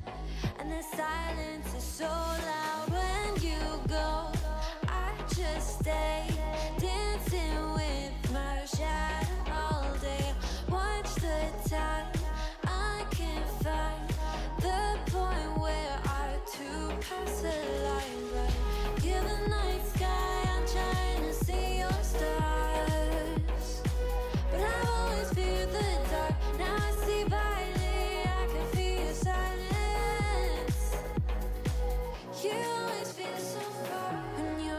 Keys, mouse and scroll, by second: 2.0 p, 2.7 Tab, 3.1 click, 3.5 Tab, 4.9 click, 5.4 g, 6.0 a, 6.1 g, 7.3 alt+z, 7.6 click, 8.0 x, 8.5 alt+z, 9.3 click, 10.3 1, 10.5 alt+z, 10.7 click, 11.5 alt+z, 11.6 shift+middle click, 12.5 ctrl+l, 12.7 g, 15.1 click, 15.7 g, 16.4 alt+z, 16.7 click, 17.0 alt+z, 17.3 g, 19.7-20.1 middle drag, 20.1 scroll down 4, 20.3 middle click, 20.7 ctrl+l, 21.1 shift+middle click, 21.3-21.7 scroll up 4, 21.7 s, 25.7-26.0 scroll down 4, 26.0-26.4 middle drag, 26.4 scroll up 3, 26.7 g, 27.9 click, 28.5 g, 29.9-30.3 shift+middle drag, 30.3 scroll up 2, 30.6-32.0 middle drag, 32.9 middle click, 33.2 scroll down 3, 33.3-34.7 middle drag.